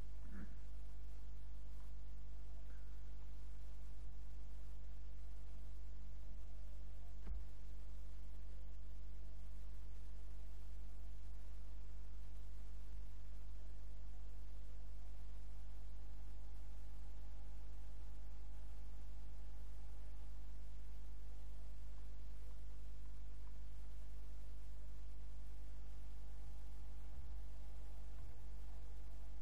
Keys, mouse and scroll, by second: 0.2 middle click, 5.7-9.6 right drag, 7.3 Tab, 8.9 click, 13.0 s, 21.9-25.8 middle drag, 27.2 g.